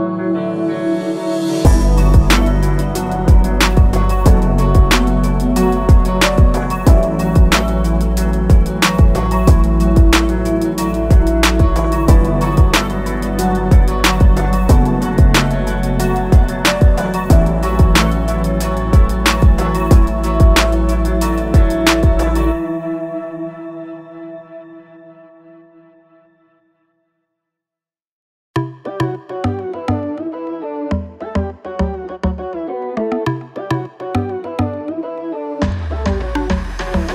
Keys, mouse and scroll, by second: 6.6 click, 6.9 i, 9.6 click, 10.8 a, 11.0 click, 13.6 click, 15.1 i, 15.8 click, 23.9 a, 24.1 click, 31.4 click, 31.7 i, 33.4 click.